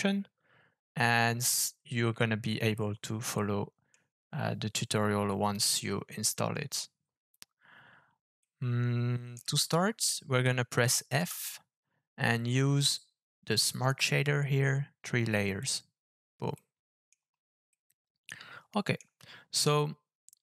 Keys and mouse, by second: 3.5 middle click, 8.5 middle click, 16.5 middle click, 17.7-19.0 middle drag.